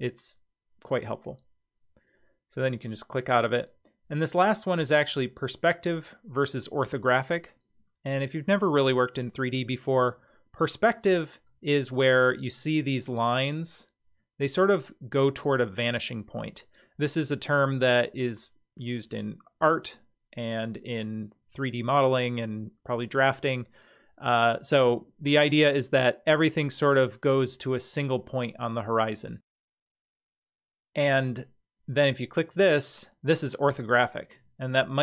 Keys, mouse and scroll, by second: 2.6 click, 11.5-12.6 middle drag, 32.3 click.